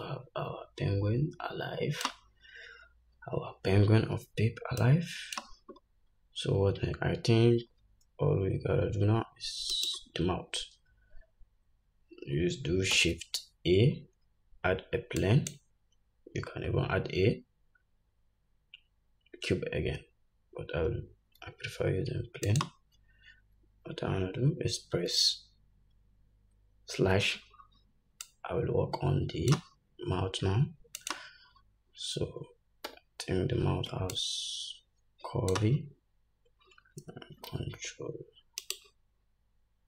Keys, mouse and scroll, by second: 6.0-9.0 scroll up 2, 10.0 shift+right click, 13.2 shift+a, 27.2 /, 28.5-31.4 drag, 30.6 s, 33.2 Tab, 34.5-39.8 drag, 37.8 ctrl+b.